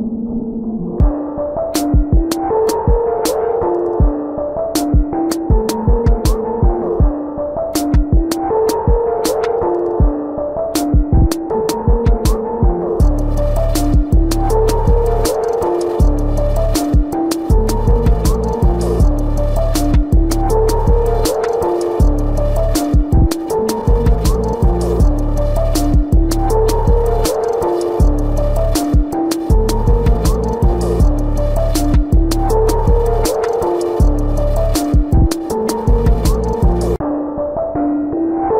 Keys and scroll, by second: 1.1 ctrl+alt+z, 16.1 ctrl+-, 35.8 space, 37.6 space.